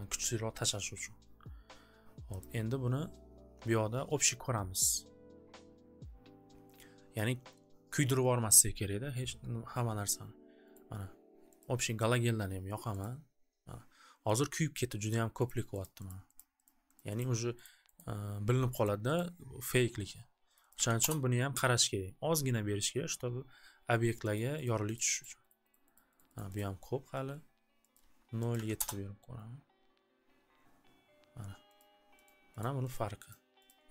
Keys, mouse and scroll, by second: 2.4-7.5 drag, 10.7 click, 13.0 right click, 15.0 click, 15.4 click, 15.8 click, 16.1 click, 16.4 click, 16.6 click, 17.0 click, 17.2 click, 17.6 click, 18.0 click, 18.8 click, 19.1 click, 20.5 right click, 20.7 right click, 20.7 1, 21.0 KP_1, 24.3 click, 24.7 click, 24.9 click, 25.2 click, 25.5 click, 25.7 click, 25.9 click, 26.3 click, 26.3 click, 26.7 click, 27.9 click, 27.9 0, 28.5 click, 28.5 7, 28.7 Return, 31.7 click, 32.2 click, 32.6 click, 32.9 click, 33.3 click, 33.7 click.